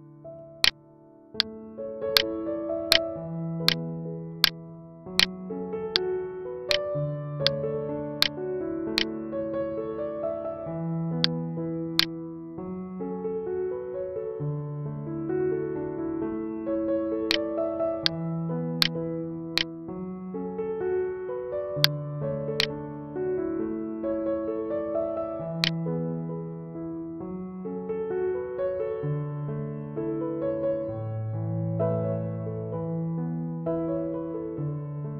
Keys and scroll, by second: 20.2 ctrl+z, 34.2 ctrl+z.